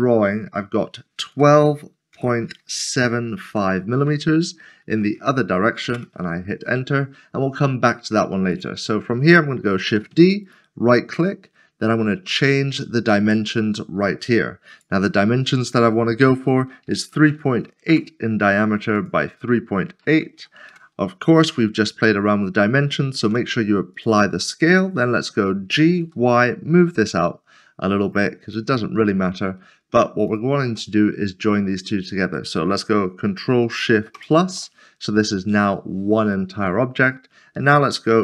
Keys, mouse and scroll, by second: 1.2-3.5 typing, 4.9 typing, 6.0 Return, 8.5 Return, 9.8 typing, 14.7 click, 16.8-17.3 typing, 17.9 Return, 19.0 click, 20.0-20.4 typing, 20.7 Return, 22.8 Return, 24.0 click, 26.0 typing, 28.0 click, 28.7 middle click, 30.3 shift+click, 33.8 ctrl+s, 34.2 ctrl+shift+], 35.7 ctrl+shift+[, 35.9 middle click, 36.3 shift+middle click, 37.0-38.2 scroll up 1.